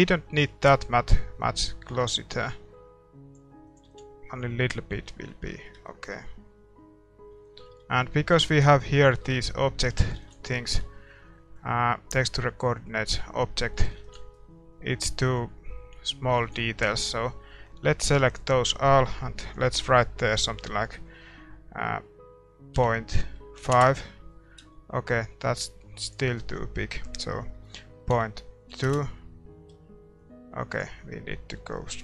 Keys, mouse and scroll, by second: 3.7-5.4 drag, 3.8 ctrl+s, 4.3-23.7 middle drag, 30.4-32.0 drag.